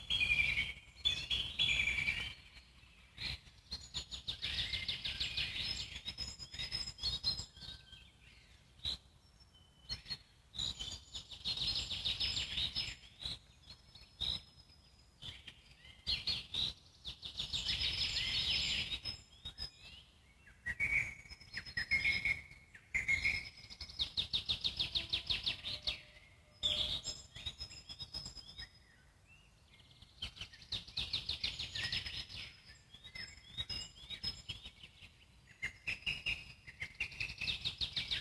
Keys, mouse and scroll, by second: 1.8-3.8 alt+middle drag, 5.6 click, 8.0 click, 9.3 click, 10.0-12.0 alt+middle drag, 13.6 Tab, 14.1-15.3 alt+middle drag, 15.3 click, 16.3 middle click, 16.7 click, 17.8 click, 18.3 z, 18.7 click, 19.1 `, 20.0-20.4 scroll down 2, 20.4 alt+middle click, 20.9 z, 21.2-22.2 alt+middle drag, 22.2 e, 23.5 scroll down 2, 23.7 alt+middle click, 24.2 s, 25.0-27.5 alt+middle drag, 27.5 s, 28.7-29.8 alt+middle drag, 29.8 click, 32.1 click, 35.1-36.2 alt+middle drag, 36.2 3, 36.3 click, 36.8 middle click, 37.0 scroll down 2, 37.3 alt+middle click, 38.1 e.